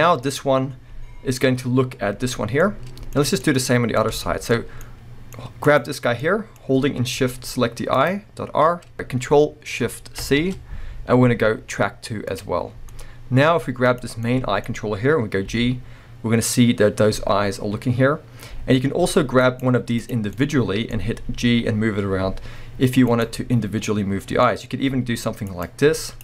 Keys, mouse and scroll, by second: 3.4 scroll up 1, 3.6-5.6 middle drag, 5.6 click, 6.2-8.0 middle drag, 8.0 shift+click, 8.9 ctrl+shift+p, 10.2 ctrl+shift+c, 12.7 scroll down 1, 12.9-13.8 middle drag, 13.8 click, 14.2-14.9 middle drag, 14.7 scroll up 2, 15.5 g, 19.6-20.0 right drag, 20.0 click, 20.5 middle click, 21.2-23.2 middle drag, 21.2 g, 23.2 right click, 23.4 middle drag, 24.9-26.1 middle drag, 24.9 g, 26.1 click.